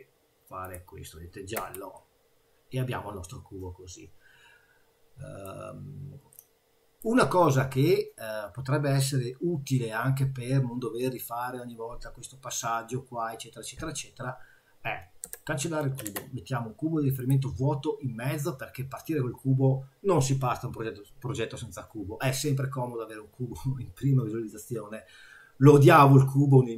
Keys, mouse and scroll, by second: 1.6 Tab, 1.9 middle click, 5.4 scroll up 1, 6.3 middle click, 15.2 Delete, 16.1 shift+a, 25.3-25.7 scroll down 2, 25.7 scroll up 2, 26.1 middle click.